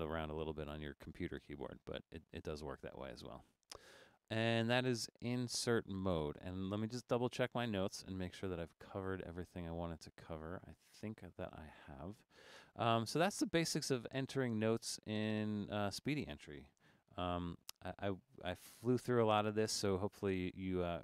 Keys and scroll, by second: 14.5 Escape, 16.9 BackSpace.